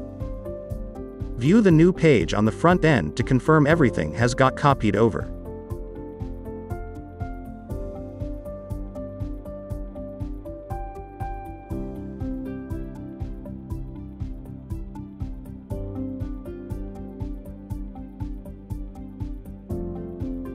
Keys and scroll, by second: 11.7 super+Up.